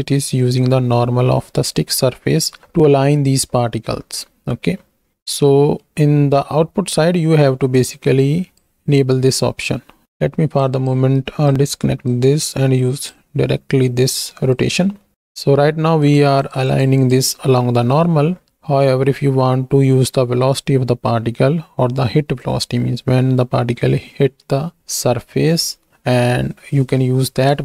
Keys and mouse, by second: 5.1 middle click, 7.7 click, 10.0 ctrl+z, 10.7 click, 11.1 ctrl+click, 12.1-13.1 drag, 14.0 click, 14.9 middle click, 16.0 click, 16.9 click, 17.7 middle click.